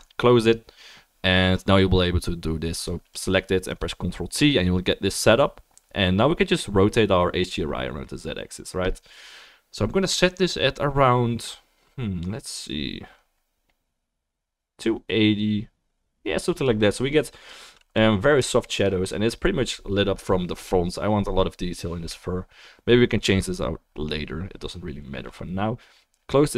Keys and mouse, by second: 0.0-2.9 drag, 0.0-15.0 middle drag, 0.0-15.0 right drag, 3.1 click, 3.7 click, 6.5-15.0 drag, 25.4-26.5 drag.